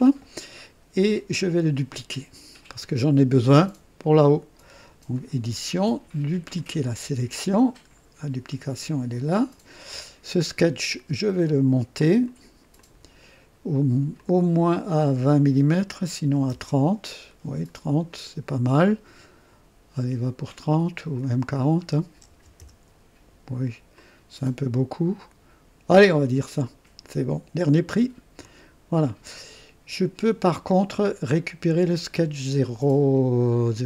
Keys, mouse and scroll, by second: 5.1 click, 6.5 click, 7.7 scroll down 1, 8.8 click, 12.2 click, 12.7 click, 14.1 click, 16.2 KP_3, 16.4 KP_0, 16.5 KP_0, 18.1-20.3 drag, 21.2 click, 22.3 KP_4, 22.6 KP_0, 23.6 typing, 23.9-26.1 drag, 28.4 click, 32.0 click, 33.6-33.8 drag.